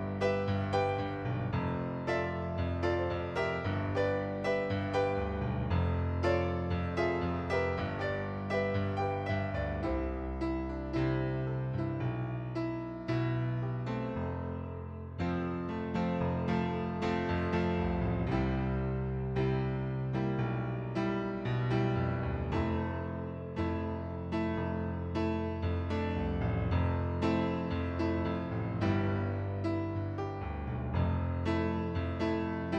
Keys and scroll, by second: 3.0-3.4 typing, 4.6-8.5 typing, 26.8 ctrl+d.